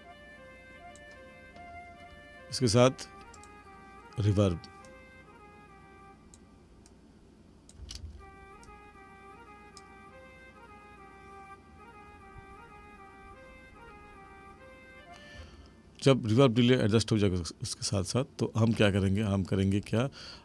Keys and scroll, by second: 7.8 space, 15.3 space.